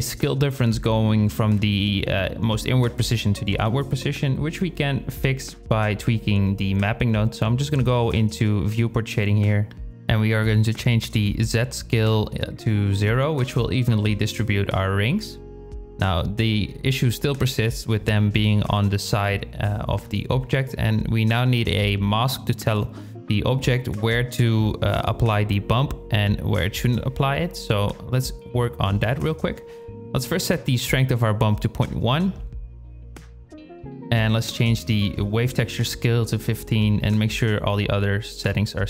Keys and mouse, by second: 5.6 KP_0, 10.4-13.0 drag, 23.1 shift+click, 25.2 drag, 25.9 g, 27.4 shift+a, 28.8-31.1 drag, 33.8-34.9 drag, 37.5 click.